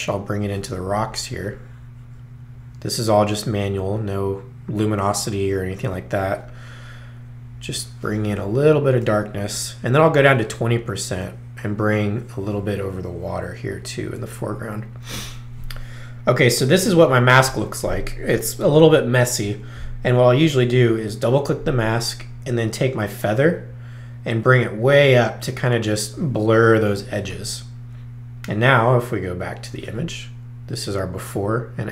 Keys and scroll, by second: 10.2 2.